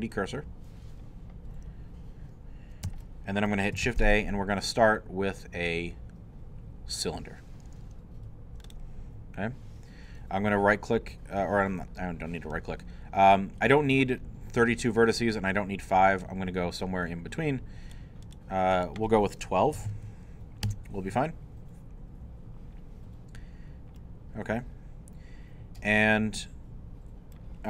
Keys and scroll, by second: 3.8 shift+a, 19.5-20.4 typing, 20.7 Return.